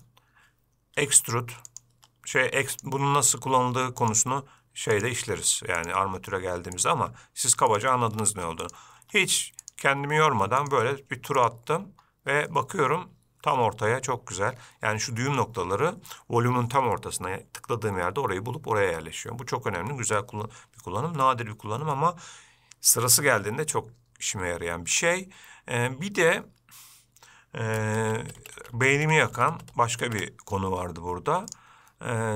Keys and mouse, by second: 1.3 e, 2.2-12.8 e, 12.8-15.7 middle drag, 22.2-23.4 shift+middle drag, 28.3-30.5 ctrl+z, 31.9-32.3 drag.